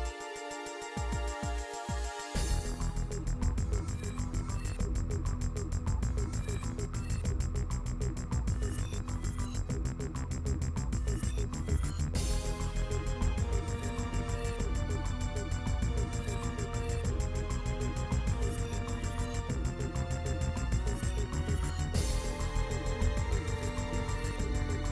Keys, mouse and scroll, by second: 0.0 middle click, 0.2 click, 0.9 click, 1.6 click, 2.2 middle click, 2.6 ctrl+b, 4.2 click, 4.5 middle click, 4.8 scroll down 1, 4.9 shift+middle click, 5.0 ctrl+s, 5.1 middle click, 6.6 scroll up 1, 6.8 middle click, 8.5 middle click, 9.1 middle click, 9.6 click, 10.7-12.4 middle drag, 12.4 l, 12.6 ctrl+z, 13.5 middle click, 14.0 middle click, 14.8 scroll up 1, 14.9 middle click, 15.2 KP_1, 15.4-15.8 scroll up 2, 15.5 shift+middle click, 15.8 shift+middle click, 16.1 s, 16.7 ., 17.3 s, 17.8 middle click, 18.0 scroll down 6, 18.1 middle click, 18.7 scroll up 2, 18.8 shift+middle click, 19.2 s, 20.1 middle click, 20.5-21.2 scroll down 3, 20.6 middle click, 21.2 middle click, 21.5 ctrl+s, 23.5 middle click, 24.0 scroll up 1, 24.1 shift+middle click.